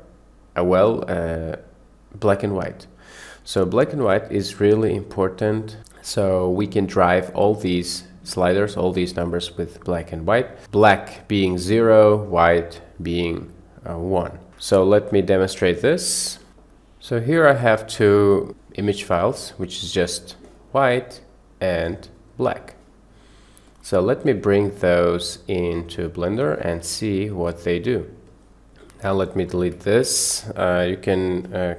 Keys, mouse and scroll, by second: 4.3 click, 9.4 click, 15.1 middle click, 28.7 click.